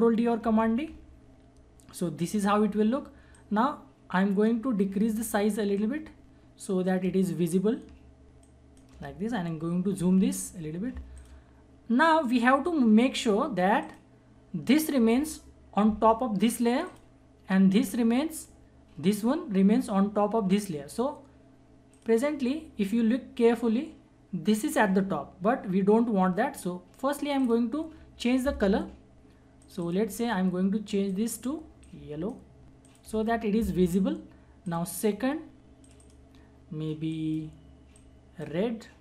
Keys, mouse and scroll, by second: 0.4 ctrl+d, 3.3-5.8 drag, 5.8-10.1 shift+drag, 10.0 ctrl+=, 11.2 click, 14.0 click, 16.8 click, 27.4 click, 27.6-39.0 drag.